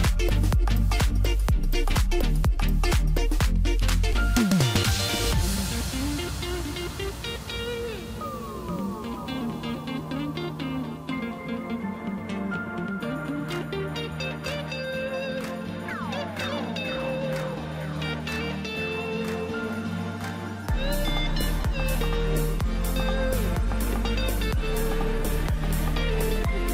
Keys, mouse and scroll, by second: 0.4 s, 2.3 KP_1, 3.1-3.7 scroll up 2, 4.8 shift+d, 7.8 s, 9.6 KP_7, 10.9 click, 11.6-12.8 scroll down 1, 12.8 g, 14.8 g, 19.0 ctrl+a, 23.4-25.6 drag.